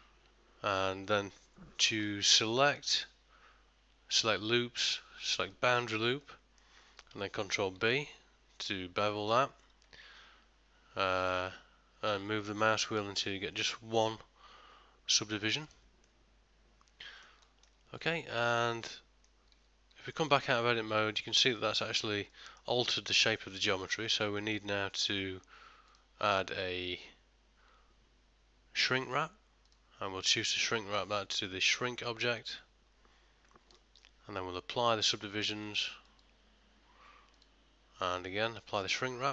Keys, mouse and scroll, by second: 2.8 click, 6.3 middle click, 7.8 ctrl+b, 16.1 middle click, 17.5 ctrl+middle click, 17.8 ctrl+middle click, 18.3 Tab, 19.0 middle click, 19.6 z, 20.2 ctrl+middle click, 20.6 middle click, 23.8 ctrl+middle click, 24.1 shift+middle click, 24.5 ctrl+middle click, 26.0 click, 30.6 click, 33.8 ctrl+middle click, 36.2 click, 37.4 click.